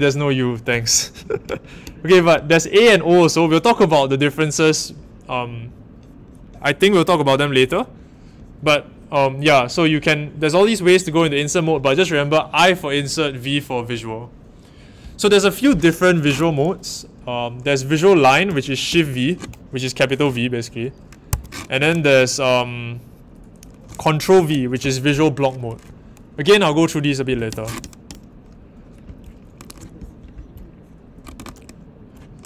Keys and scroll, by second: 18.9 shift+v, 21.3 Escape, 24.3 ctrl+v, 27.3 Escape.